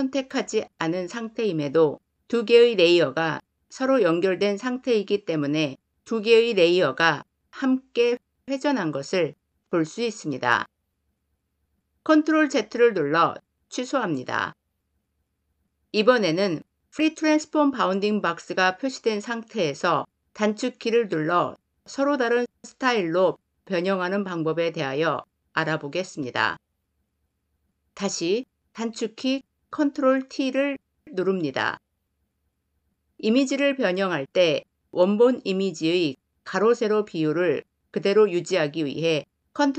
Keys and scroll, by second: 12.0 ctrl+z, 28.9 ctrl+t.